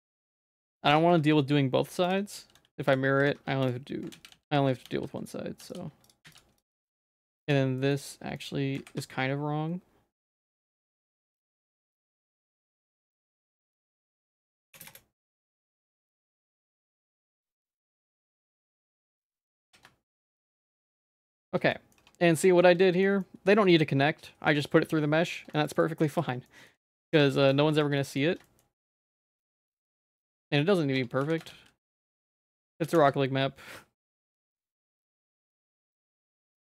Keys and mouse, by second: 0.2 middle click, 0.7 z, 0.8 shift+middle click, 1.2 1, 2.1 click, 2.3 x, 3.2 2, 3.4 1, 4.2 ctrl+z, 4.3 ctrl+z, 4.5 ctrl+z, 4.9 ctrl+z, 5.6 x, 6.3 x, 7.0 middle click, 7.4 click, 7.8 middle click, 8.4 shift+middle click, 8.8 a, 9.0 q, 11.6 shift+middle click, 12.0 shift+middle click, 12.4 middle click, 14.4 s, 15.4 z, 15.8 middle click, 16.4 Tab, 16.9 middle click, 17.2 z, 17.5 middle click, 17.9 Tab, 18.1 middle click, 18.5 z, 18.9 middle click, 19.2 shift+middle click, 19.6 g, 21.0 middle click, 21.4 z, 21.8 middle click, 22.0 Tab, 22.3 shift+middle click, 22.9 shift+middle click, 23.3 middle click, 23.7-24.8 shift+middle drag, 25.5 shift+middle click, 25.8 shift+middle click, 26.5 middle click, 26.9 ctrl+s, 27.0 click, 27.1 Tab, 27.3 middle click, 27.5 shift+middle click, 27.8 a, 28.0 middle click, 28.5 shift+middle click, 29.0 middle click, 29.4 middle click, 30.1 shift+middle click, 30.4 middle click, 30.6 middle click, 31.0 Tab, 31.2 s, 32.8 s, 34.8 middle click, 35.1 middle click, 35.4 Tab, 36.5-36.7 typing.